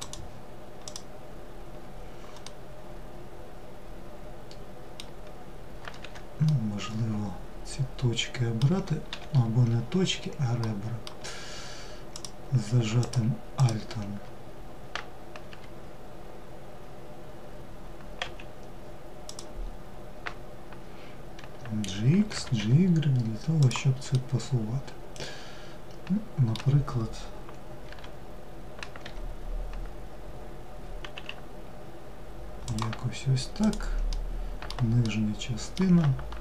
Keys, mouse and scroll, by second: 0.5 click, 2.1-5.1 middle drag, 6.0-8.7 middle drag, 8.7 2, 9.7-10.2 scroll up 1, 10.2-11.7 middle drag, 11.7 click, 12.6 alt+click, 13.2 alt+click, 15.1 g, 23.7-26.7 middle drag, 33.2 click, 33.7-36.4 middle drag.